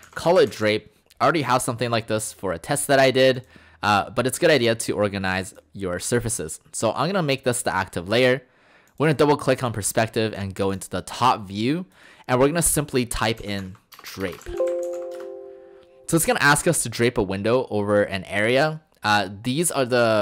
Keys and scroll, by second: 0.0-0.8 typing, 13.2-14.2 typing, 15.2 Return.